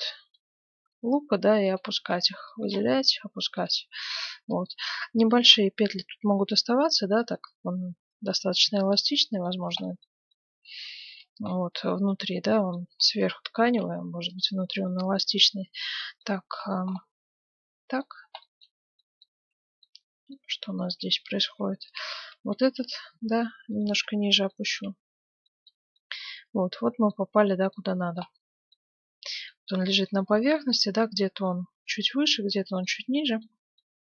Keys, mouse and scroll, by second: 0.3 g, 1.9 a, 2.1 b, 2.6 g, 3.8 a, 3.9 b, 4.6-6.4 right drag, 4.8-6.5 middle drag, 7.4-9.0 right drag, 7.6 a, 7.9 b, 8.4 g, 9.1 right click, 9.8-11.8 middle drag, 12.0 a, 12.9 b, 13.6 g, 14.5 Tab, 15.0-15.8 scroll down 1, 15.4 z, 15.8-21.7 middle drag, 19.3 Tab, 20.4 a, 21.0 z, 21.7 b, 22.5 g, 23.9 Tab, 24.5-31.8 middle drag, 25.0 z, 31.8-32.3 scroll up 1, 32.3-34.1 middle drag.